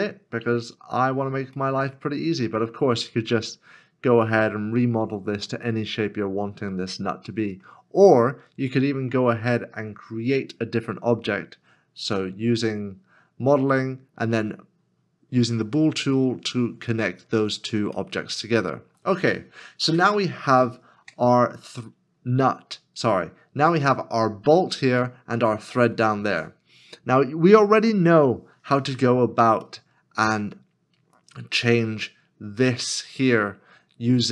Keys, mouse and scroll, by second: 0.8 scroll down 1, 1.8 middle click, 3.3 scroll up 1, 6.0 scroll down 1, 6.8 middle click, 18.0 middle click, 21.0 Tab, 29.7 shift+middle click.